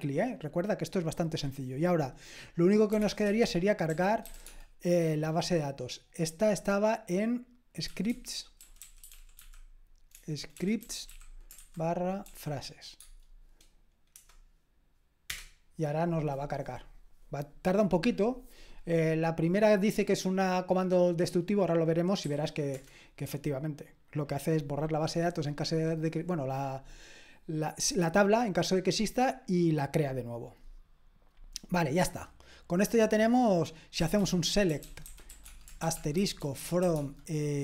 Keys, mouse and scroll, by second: 2.7-4.8 typing, 7.8-12.3 typing, 12.9 Tab, 14.1 Return, 15.3 typing, 22.7 typing, 33.9-37.6 typing.